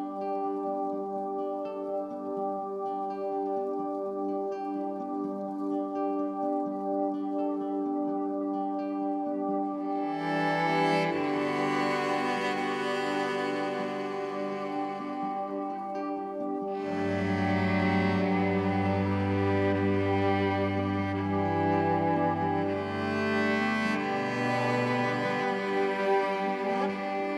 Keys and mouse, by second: 0.8 click, 1.1 click, 1.9-7.8 drag, 8.4 click, 8.8 click, 9.4 alt+click, 10.7 click, 11.0 click, 11.5 ctrl+alt+click, 12.6 click, 13.2 alt+click, 13.9 click, 15.0 click, 15.5 click, 16.5 1, 16.9 ctrl+alt+click, 17.6 ctrl+alt+click, 18.8 g, 21.8 Escape, 23.5 alt+click, 24.4-24.8 typing.